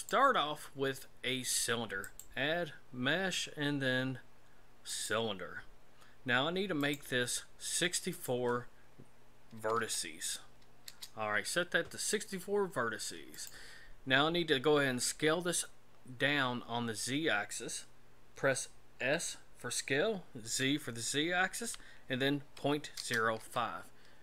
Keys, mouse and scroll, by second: 0.0 click, 2.0 click, 6.9 click, 8.1 click, 13.3 click, 19.0 s.